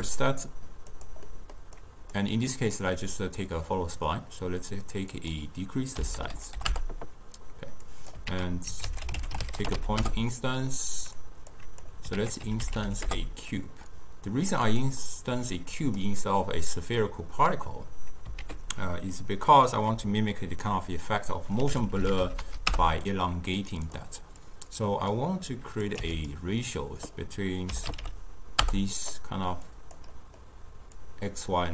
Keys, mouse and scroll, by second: 1.3 middle click, 1.8-4.9 drag, 5.2-8.4 drag, 8.4 ctrl+a, 11.6 click, 12.2 ctrl+a, 15.6 click, 17.1-18.5 middle drag, 18.5 ctrl+a, 24.5-26.4 drag, 26.8-29.8 drag, 30.2-31.0 middle drag, 31.0-31.7 drag.